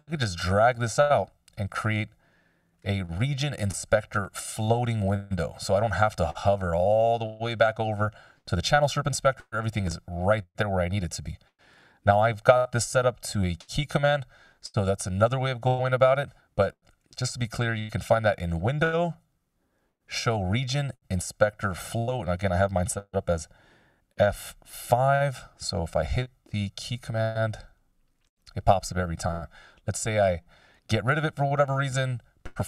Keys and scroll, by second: 30.5 F5.